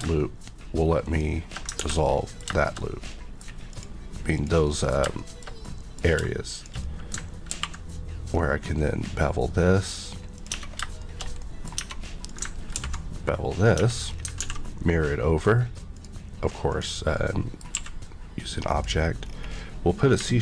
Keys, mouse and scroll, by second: 1.7 ctrl+x, 2.0 middle click, 2.5 shift+middle click, 2.7-3.0 shift+scroll up 2, 3.0 middle click, 3.7 click, 4.3 click, 4.6 middle click, 6.5 shift+click, 6.8 middle click, 7.5 b, 8.3-8.8 scroll up 1, 8.8 scroll up 1, 10.4 click, 10.4 Tab, 11.0 shift+middle click, 11.4 middle click, 11.8 Tab, 12.3 click, 12.7 ctrl+b, 13.6 click, 13.8 Tab, 14.0 scroll down 1, 14.4 alt+x, 15.9 click, 16.7 click, 17.1 middle click, 17.7 q, 18.7 click, 19.2-20.1 scroll up 1.